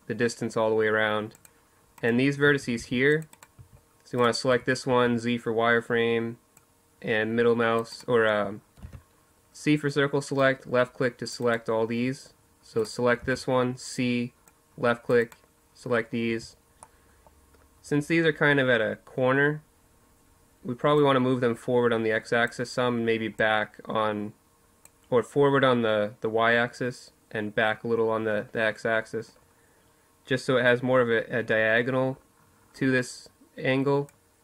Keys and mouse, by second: 1.2-3.6 typing, 2.0 click, 2.9-4.6 right drag, 6.7-11.5 drag, 7.5 c, 11.9 c, 13.9 click, 15.0 z, 15.6-17.9 middle drag, 19.7-21.5 drag, 22.1-23.9 drag, 32.8-34.4 drag.